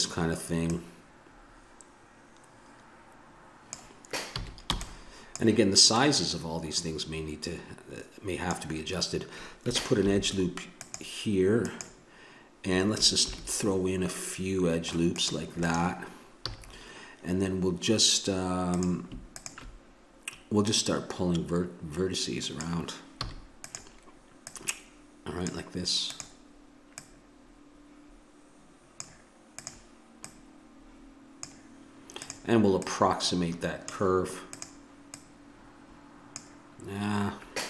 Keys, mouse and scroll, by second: 0.7-3.3 drag, 4.4 a, 4.7 b, 5.9-7.7 drag, 10.0 ctrl+r, 13.2 ctrl+r, 16.4 a, 18.7-20.8 right drag, 20.8-22.6 drag, 23.2 a, 23.6-25.7 right drag, 26.1 right click, 26.7 a, 28.7 click, 29.6-30.7 drag, 34.0-37.6 drag.